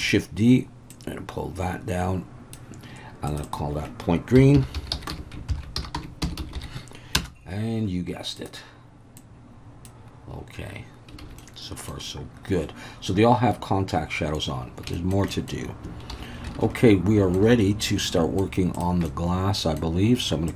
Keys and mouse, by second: 0.0-2.5 drag, 3.3 click, 3.4-7.7 drag, 6.4 e, 8.4 drag, 11.2 alt+a, 11.4-11.9 middle drag, 14.9 shift+middle click, 15.3 middle click, 16.1 alt+h, 16.6 alt+a, 16.8-17.4 middle drag, 18.0-18.4 middle drag, 19.1-19.8 middle drag.